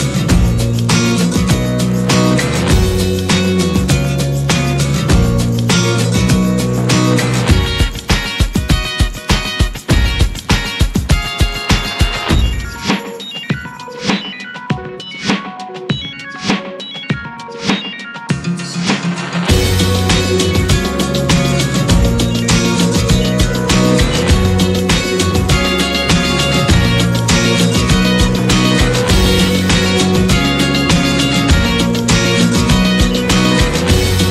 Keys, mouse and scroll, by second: 0.3-0.6 middle drag, 0.6 scroll up 4, 1.0-1.4 middle drag, 1.4 scroll up 1, 1.6 click, 2.0 ctrl+1, 2.5-4.9 middle drag, 4.9 Tab, 5.3-7.1 middle drag, 7.1 Tab, 7.6-9.7 middle drag, 7.6 scroll down 2, 8.6-8.9 scroll down 2, 9.7 click, 10.8-22.9 drag, 25.3 click, 25.9 scroll up 4, 26.5 click, 26.8-27.3 middle drag, 27.3 scroll up 1, 27.6-33.2 middle drag, 33.2 click, 33.4-33.9 scroll down 5, 33.9-34.3 middle drag.